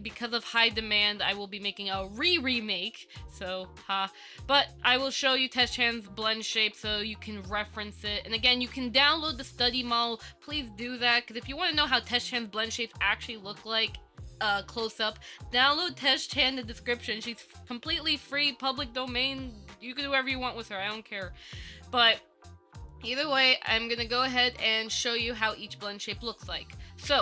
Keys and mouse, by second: 24.6 click.